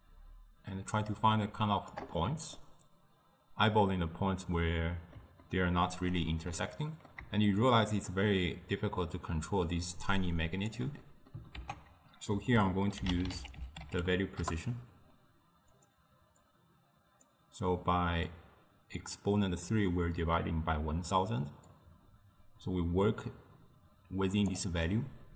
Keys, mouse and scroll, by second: 2.6-7.7 middle drag, 7.7-10.7 shift+drag, 11.1-11.6 middle drag, 11.6 ctrl+a, 16.5-21.2 drag, 21.7-24.7 drag, 24.9-25.3 middle drag.